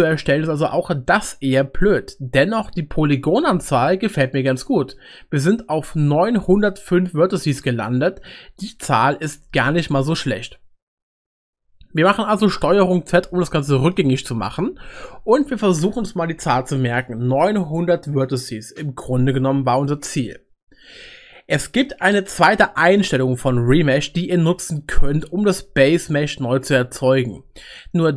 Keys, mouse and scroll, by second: 14.1 ctrl+z.